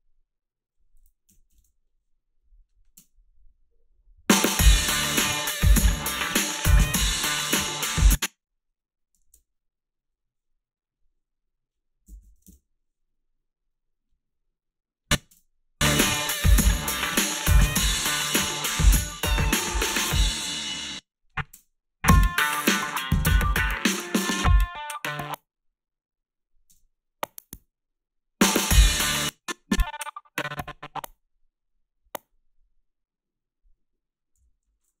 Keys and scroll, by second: 1.5 1, 1.6 Return, 3.0 space, 7.9 space, 9.3 alt+shift+s, 11.8-12.8 typing, 15.3 space, 20.8 space, 21.5 space, 25.1 space, 26.7 space, 28.9 space, 34.4 g.